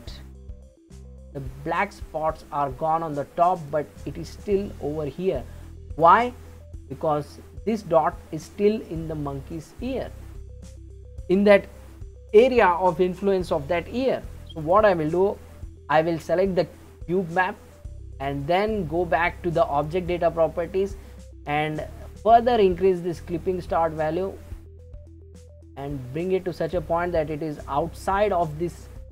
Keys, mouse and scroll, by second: 5.9 click, 13.0 drag, 14.6 click, 19.7 click, 22.1-25.1 shift+drag.